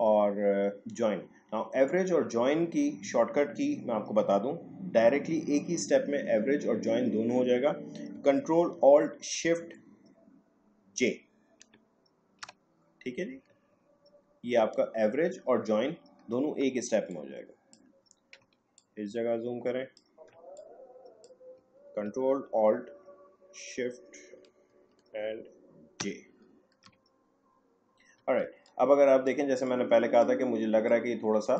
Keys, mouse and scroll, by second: 8.1 ctrl+Num_Lock, 11.6 ctrl+alt+shift+j, 13.6 alt+scroll down 1, 16.6 space, 17.0 click, 17.1 space, 18.8-26.0 ctrl+drag, 22.0 w, 26.0 ctrl+alt+shift+j, 28.4 space, 28.6 click, 28.9 space, 29.6 click, 29.8 space, 30.9 click, 31.0 space.